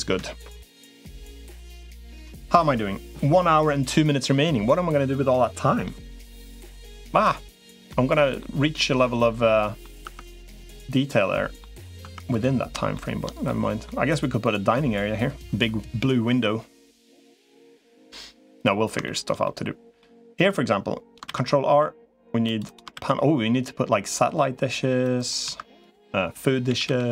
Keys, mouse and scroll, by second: 0.5 middle click, 1.9 middle click, 7.7 middle click, 9.2 middle click, 9.9 Tab, 10.3-11.4 middle drag, 11.9 Tab, 12.1 click, 12.7 shift+middle click, 13.3 middle click, 16.9 middle click, 18.8 shift+middle click, 19.2 middle click, 21.1 ctrl+r, 22.7 ctrl+r, 25.3 2, 26.5 g.